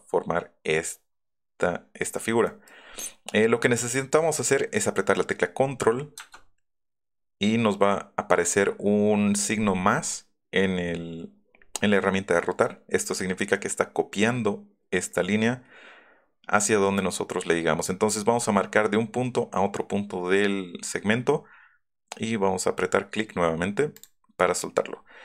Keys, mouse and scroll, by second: 2.4 middle click, 2.8 middle click, 24.0 click.